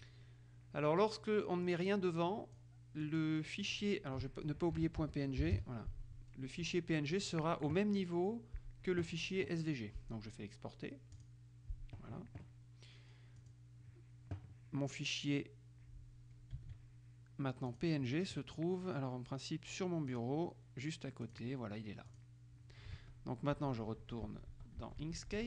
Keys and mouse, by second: 1.8-3.2 drag, 3.8-4.8 drag, 4.8-6.3 typing, 11.3 click, 13.5 click, 17.9 click, 20.3 click, 21.4 click, 22.3 click, 23.1 alt+Tab, 24.1 alt+Tab.